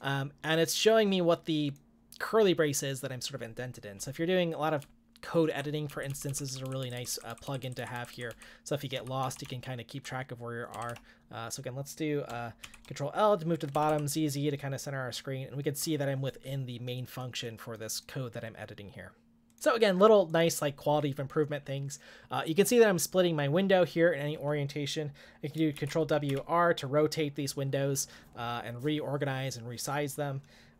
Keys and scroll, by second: 4.9-5.9 k, 8.7-11.4 typing, 12.6 shift+l, 13.7 z, 13.9 z, 25.8 ctrl+w, 26.3 r.